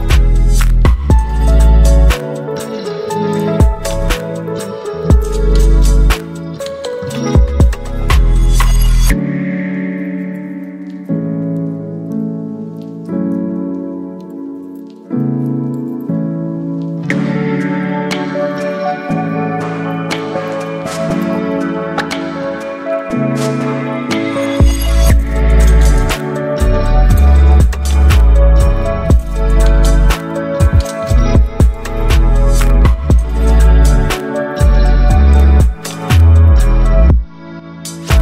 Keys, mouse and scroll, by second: 8.0 click, 14.3 click, 14.9-23.8 drag, 23.8 ctrl+t, 26.0-33.1 drag, 36.0-38.2 drag.